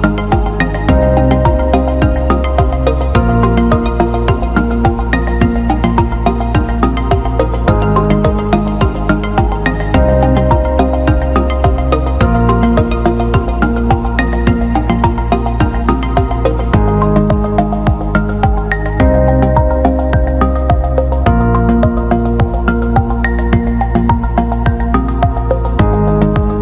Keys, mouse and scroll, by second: 0.1 click, 0.4 click, 0.9 click, 1.5 click, 2.8 click, 4.2 click, 9.0-11.0 alt+middle drag, 12.2-15.6 drag, 16.0 alt+middle click, 17.6-17.9 alt+middle drag, 18.1 alt+shift+middle drag, 18.4-21.8 alt+middle drag, 22.4 click, 23.2 alt+shift+middle click, 23.9 click, 24.1 click.